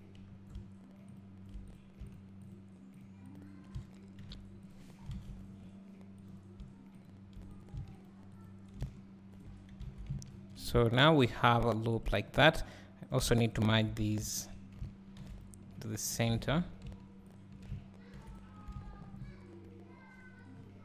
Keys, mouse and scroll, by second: 1.8 click, 2.2 shift+click, 5.2 alt+a, 6.4 click, 8.0 shift+click, 10.0 alt+a, 10.4 ctrl+r, 12.2 right click, 13.2 click, 14.4 shift+click, 16.4 ctrl+z, 17.4 shift+click, 18.8 alt+a, 19.0 scroll down 1.